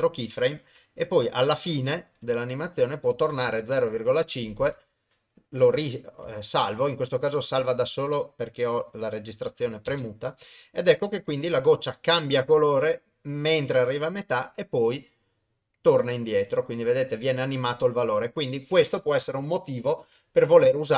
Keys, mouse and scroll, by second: 1.1 shift+Right, 3.1-4.7 drag, 9.9 shift+space.